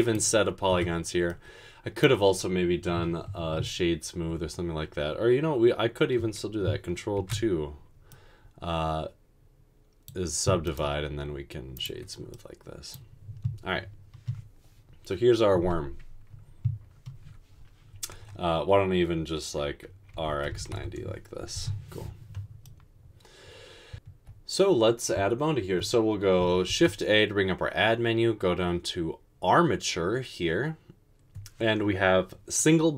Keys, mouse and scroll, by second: 0.8 Tab, 7.3 ctrl+d, 20.3-20.8 typing, 26.8 a.